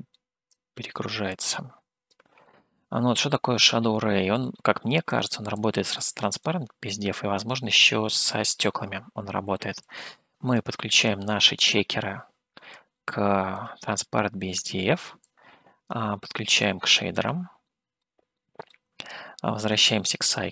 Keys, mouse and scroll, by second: 0.5 click, 1.3 click, 2.4-4.4 middle drag, 5.1-6.1 drag, 6.3-8.5 drag, 8.5-9.8 scroll up 2, 9.8 click, 11.4 middle click, 12.7 click, 13.9 middle click, 15.2 click, 16.6 click, 17.6 middle click, 18.3 middle click, 19.7 click.